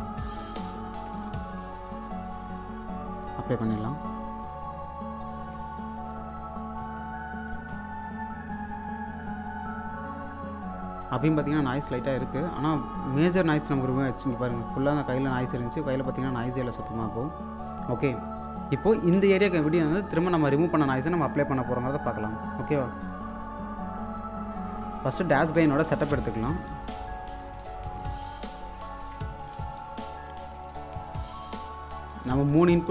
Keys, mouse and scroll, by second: 0.1 space, 1.0 space, 1.6 click, 4.7-5.3 scroll up 1, 5.3 alt+click, 5.6-6.6 scroll up 1, 6.6 click, 6.8 1, 7.2 click, 7.7 2, 11.8 scroll down 1, 11.9 alt+click, 12.5-12.9 scroll up 1, 13.4 1, 14.3 click, 15.5 2, 19.0 k, 19.7-20.5 scroll down 1, 22.2-25.3 drag, 25.9 space, 26.2 alt+click, 27.0-27.6 scroll up 1, 27.6 click, 29.8-32.9 drag.